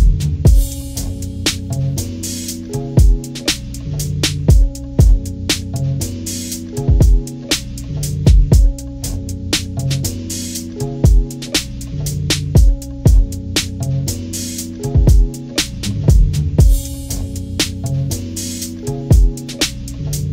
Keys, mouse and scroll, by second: 0.9 click, 1.0 click, 1.8 Down, 2.3 Left, 2.6 click, 2.7 click, 2.9 Delete, 3.1 click, 3.1 Delete, 3.4 Delete, 3.5 click, 3.7 Delete, 3.7 click, 4.0 Delete, 4.1 click, 4.5 click, 4.6 Delete, 4.7 click, 4.8 Delete, 5.4 click, 5.7 click, 6.4 click, 7.5 click, 8.3 click, 8.8 click, 9.3 click, 9.9 click, 10.8 click, 11.0 click, 11.7 click, 12.3 click, 12.9 click, 13.7 click, 14.2 click, 14.9 click, 15.4 ctrl+-, 15.6 ctrl+=, 16.1 click, 16.5 click, 16.6 click, 18.0 click, 19.8-20.3 drag.